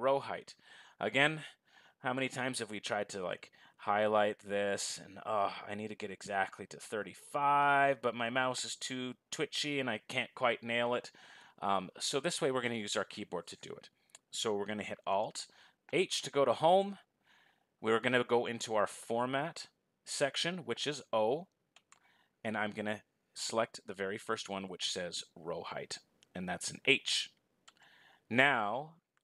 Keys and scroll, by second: 16.1 alt+h.